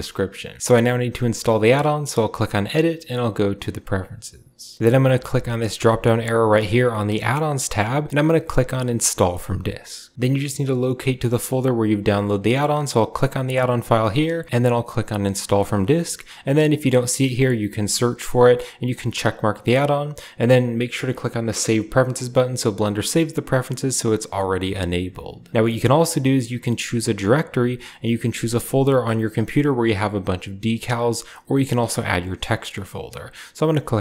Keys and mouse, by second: 0.4 middle click, 2.6-4.8 drag.